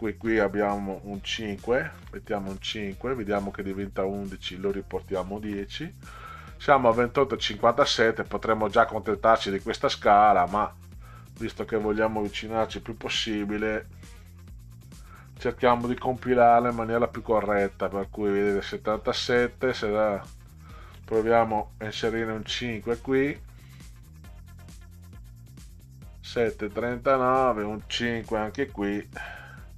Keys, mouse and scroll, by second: 2.0 5, 4.0 click, 5.5 0, 11.3 click, 13.0 6, 14.8 click, 15.9 BackSpace, 20.4 click, 22.1 5, 24.0 click, 25.2 BackSpace, 27.2 click, 29.2 5.